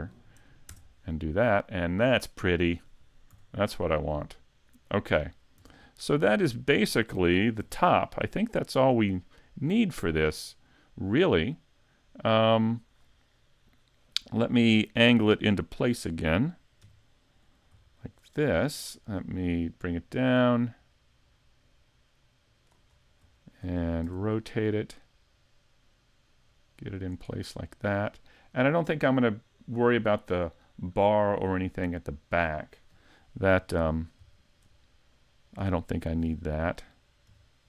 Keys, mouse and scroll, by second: 2.0 middle click, 3.3 a, 3.6-4.0 scroll down 2, 4.0 middle click, 5.6 Tab, 6.3 scroll down 1, 6.7 shift+middle click, 7.6 alt+h, 8.8 right click, 9.3 middle click, 10.1 right click, 10.5 middle click, 15.8 KP_1, 16.8 KP_5, 17.4-17.8 scroll up 1, 17.8 shift+middle click, 18.3-18.7 scroll up 1, 18.7 shift+middle click, 20.2 click, 22.9-23.4 scroll up 3, 23.4 shift+middle click, 24.0 r, 27.1 click, 27.3 scroll down 2, 27.6 middle click, 31.6-32.0 scroll down 3, 32.0 middle click, 33.5 KP_5, 34.3 shift+middle click, 34.8 middle click, 36.2 KP_7, 37.3 KP_5.